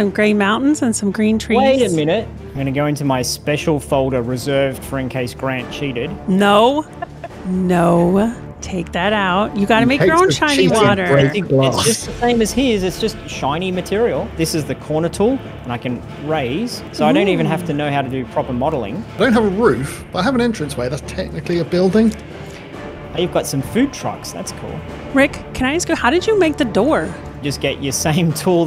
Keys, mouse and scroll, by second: 0.7 middle click, 1.1-1.7 scroll up 3, 1.7 shift+middle click.